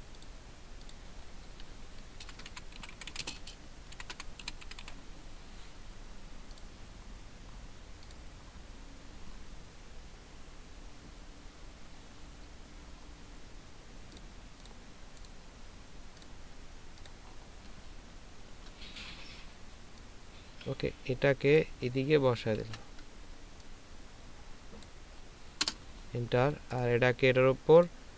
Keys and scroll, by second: 2.2-4.8 typing, 18.4 ctrl+v, 22.6 ctrl+t.